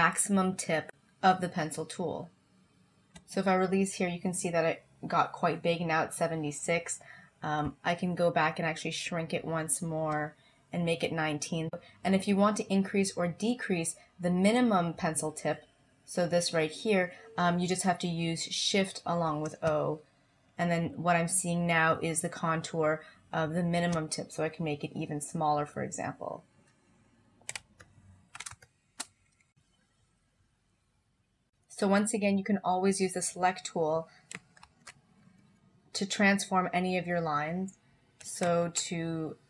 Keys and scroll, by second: 7.7 o, 19.3 o, 28.6 space.